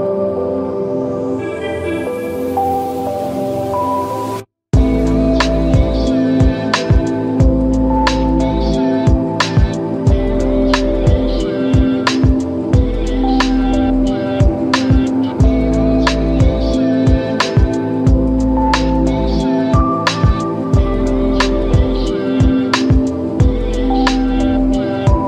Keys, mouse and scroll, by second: 0.0 click, 4.9-6.9 drag, 7.0 scroll down 1, 9.0-9.4 right click, 9.6 click, 10.2 scroll down 1, 10.5-10.9 alt+click, 10.9-12.1 alt+right click, 11.1 alt+click, 12.1 scroll down 1, 12.4 alt+click, 12.7-13.0 drag, 14.2 click, 15.0 scroll down 1, 15.3-16.1 alt+click, 17.0 right click, 17.7 click, 20.5-21.1 drag, 24.9 click.